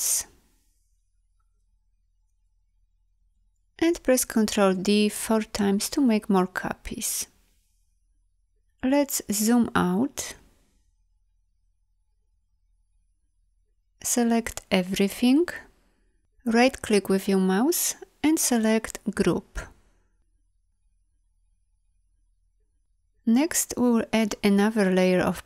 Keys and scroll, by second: 5.0 ctrl+d, 15.4 ctrl+a, 20.7 v.